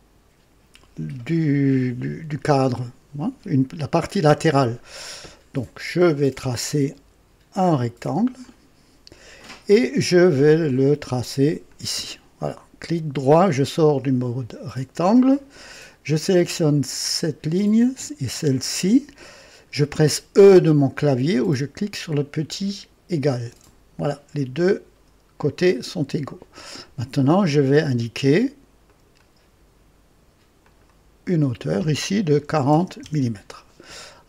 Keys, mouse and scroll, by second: 8.3 click, 10.5 click, 11.6 click, 14.0 right click, 16.4 click, 18.2 click, 23.3 e, 25.6-26.6 drag, 28.8 click, 30.5 click, 32.4 KP_4, 32.6 KP_0, 32.9 KP_Enter, 32.9 Return, 34.0-34.2 scroll down 2.